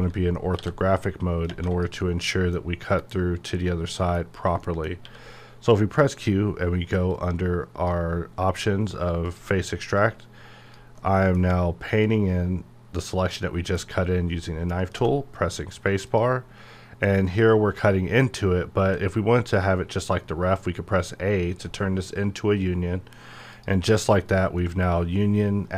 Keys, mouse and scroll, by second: 0.5 g, 2.0-4.2 middle drag, 4.2-4.6 scroll up 1, 4.6 middle click, 5.0 q, 7.1-11.0 drag, 11.0 middle click, 12.0 click, 13.3 middle click, 13.9-14.4 scroll up 1, 14.9 space, 16.0 click, 18.7 a, 23.4 a, 23.5 click, 24.2 scroll down 1, 24.5-25.7 middle drag.